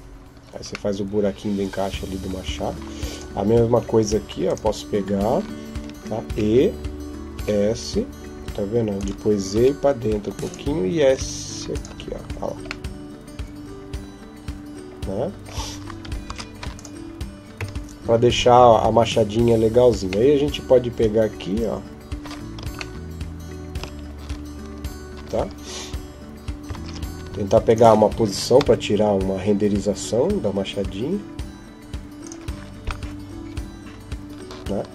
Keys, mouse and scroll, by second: 0.2-0.5 scroll down 2, 0.7 middle click, 2.5 scroll down 1, 2.9 right click, 3.5 Tab, 4.3 right click, 6.1 e, 10.9 e, 10.9 s, 11.7 Tab, 12.0-12.5 scroll down 2, 12.7 middle click, 16.0 ctrl+s, 17.4 KP_0, 20.1 middle click, 22.8 shift+middle click, 23.8-25.9 scroll up 1, 26.5 ctrl+alt+KP_0, 27.5 right click, 28.4 g.